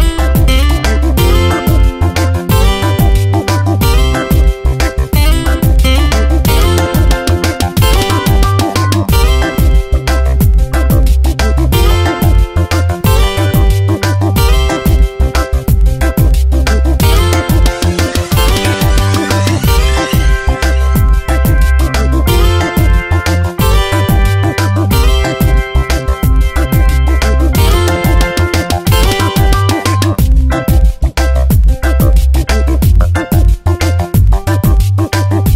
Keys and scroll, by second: 0.8 Return, 5.9 ctrl+z, 9.3 Return, 10.0 shift+Right, 11.0 shift+Up, 12.2 shift+Down, 12.5 Up, 21.4 Return, 22.1 ctrl+t, 25.7 Return, 26.6 shift+Right, 27.4 shift+Up, 27.7 shift+Right, 29.1 Up, 35.3 ctrl+a.